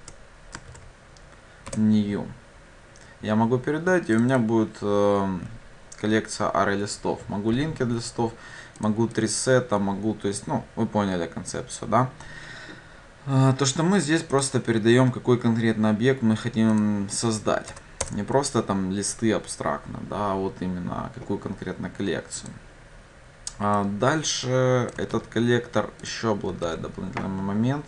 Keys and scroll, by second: 1.7 Return, 25.1 ctrl+c.